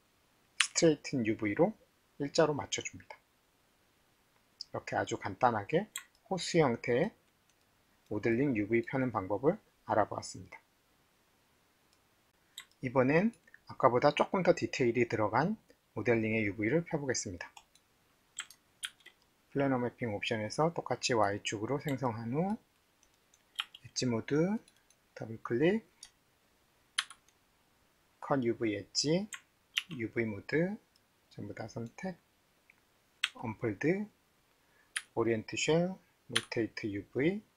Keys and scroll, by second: 0.6 t, 18.8 ctrl+s, 23.6 alt+2, 29.8 alt+4, 33.3 d, 35.0 x.